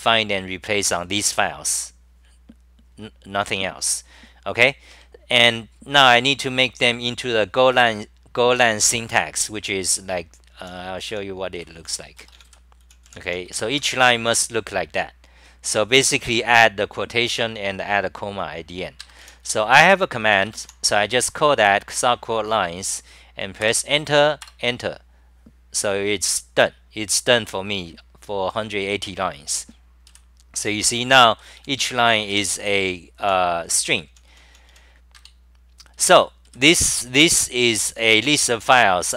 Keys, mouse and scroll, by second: 4.9 ctrl+g, 6.7-8.0 scroll down 7, 9.4-14.0 typing, 16.8 scroll down 7, 19.0-20.6 typing, 23.6 Return, 24.5 Return, 29.5-34.7 typing, 35.1 ctrl+g, 35.9 d, 36.5 d, 37.8 n.